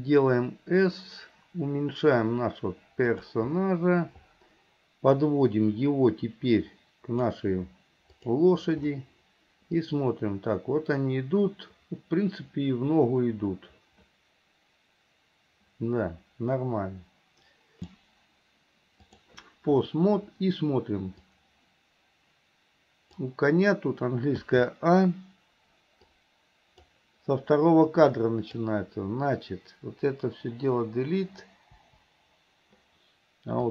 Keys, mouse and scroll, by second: 5.3-7.3 drag, 8.4 click, 9.9-17.8 drag, 21.4 click, 24.5 a, 26.2 click, 28.1-28.7 drag, 31.8 Delete.